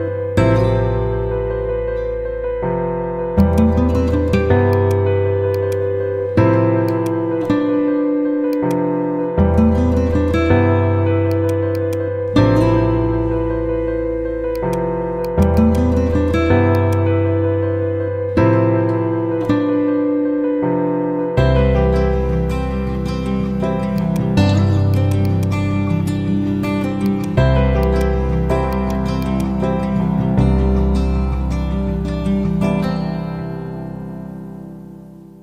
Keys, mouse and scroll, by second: 2.6 ctrl+g, 3.3 shift+click, 4.0 l, 4.7 click, 8.1 z, 8.7-10.3 drag, 14.5-16.3 drag, 32.3-34.8 typing.